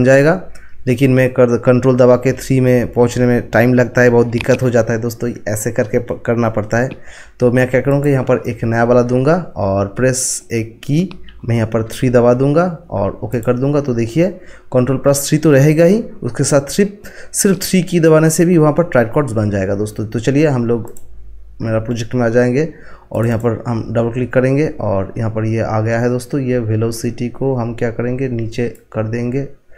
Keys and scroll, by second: 11.8 3.